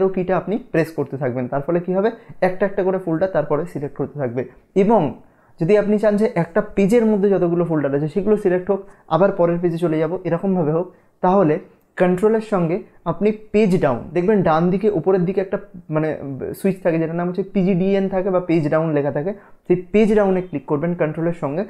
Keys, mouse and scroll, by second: 1.7 click, 2.5 Down, 3.8 Down.